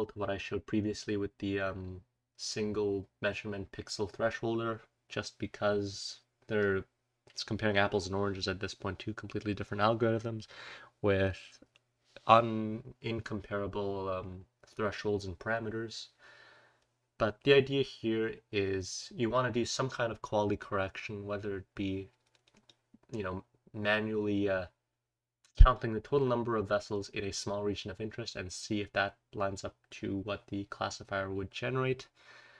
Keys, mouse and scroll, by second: 13.9-14.6 scroll down 1, 15.9-17.4 scroll down 1, 23.7-25.0 scroll down 1, 32.2-32.5 scroll down 1.